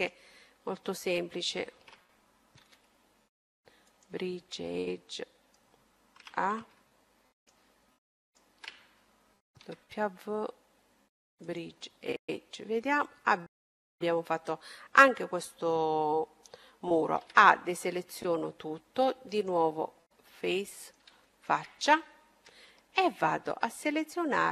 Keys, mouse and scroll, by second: 2.2 w, 4.6-6.4 middle drag, 6.0 a, 7.3-9.8 right drag, 9.6 w, 11.9-14.3 middle drag, 16.3 a, 16.9-22.1 middle drag, 18.5-20.3 drag, 22.1-24.5 right drag, 23.9-24.5 middle drag.